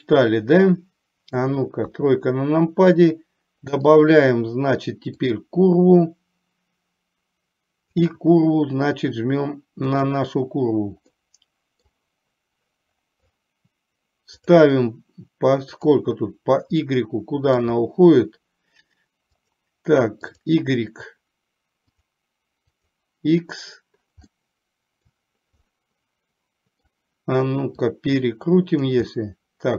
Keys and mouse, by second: 2.0 KP_3, 4.0-5.5 drag, 8.1 click, 11.2-12.0 middle drag, 14.5-16.1 drag, 17.0-17.7 middle drag, 19.5-20.6 drag, 22.1-23.1 drag, 24.4-25.1 middle drag, 25.7-26.9 middle drag, 27.9-29.0 drag, 29.1-29.7 middle drag.